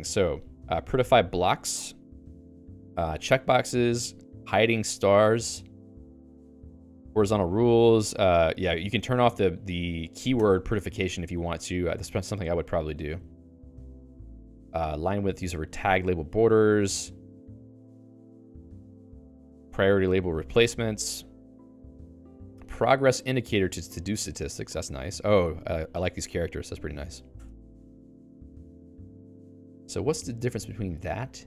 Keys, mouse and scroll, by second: 0.1 Up, 2.0 Down, 2.3 Down, 2.5 Down, 3.4 Down, 3.7 Down, 4.0 Down, 4.3 Down, 4.6 Down, 4.9 Down, 5.2 Down, 5.6 Down, 5.9 Down, 6.2 Down, 6.5 Down, 6.8 Up, 7.0 Up, 7.2 Up, 7.5 Down, 7.8 Down, 8.1 Up, 8.6 Return, 10.4 Return, 10.8 Down, 11.1 Down, 11.4 Down, 11.7 Down, 12.0 Down, 12.3 Down, 12.6 Down, 12.8 Down, 13.0 Down, 13.2 Down, 13.4 Down, 13.7 Down, 13.9 Down, 14.0 Down, 14.2 Down, 14.5-15.6 Up, 16.0 Up, 16.3 Down, 16.6 Down, 17.2 Down, 17.4 Down, 17.6 Down, 17.8 Down, 18.0 Down, 18.9 Down, 19.1-20.1 Down, 20.3 Down, 21.0 Down, 21.4 Down, 21.6 Down, 21.8 Down, 22.0 Down, 22.2-23.4 Up, 23.9 Return, 24.5 Return, 25.1 Return, 27.5 Return, 27.8 Down, 28.0 Down, 28.2 Down, 28.7 Return, 30.0 Return.